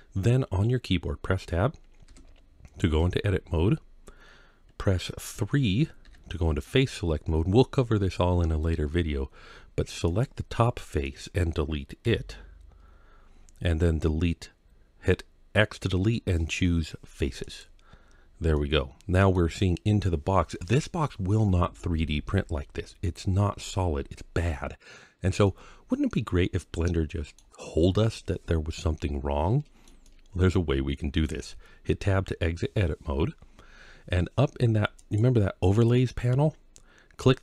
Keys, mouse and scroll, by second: 1.9 Tab, 5.8 3, 9.9 click, 10.9 middle click, 11.9 x, 17.9 scroll up 1, 18.4 middle click, 25.3-27.2 middle drag, 28.3-29.7 middle drag, 29.9-31.1 middle drag, 31.8 Tab, 34.8-37.4 drag.